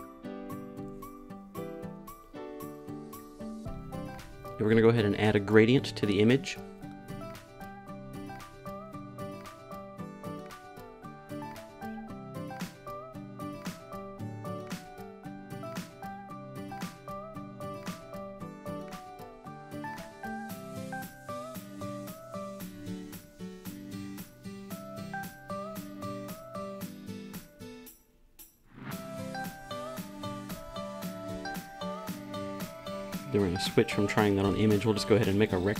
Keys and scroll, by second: 31.0 r.